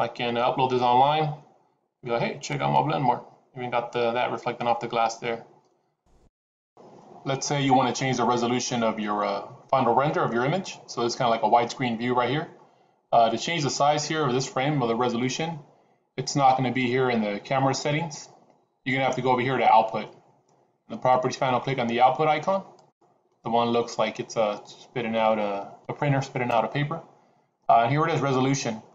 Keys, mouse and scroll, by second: 16.7-17.7 scroll down 4, 22.7 click.